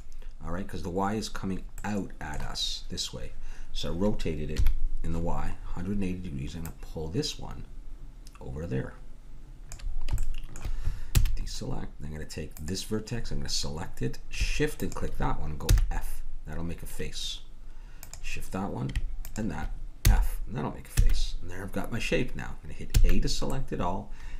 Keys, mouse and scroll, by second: 1.8-3.8 middle drag, 4.5 KP_1, 5.6-6.7 middle drag, 6.7-8.6 drag, 10.2-11.4 middle drag, 11.2 a, 12.5 middle click, 12.6-14.6 drag, 14.8-17.5 drag, 15.6 f, 18.0-21.0 drag, 20.0 f, 21.0 a, 22.9 a.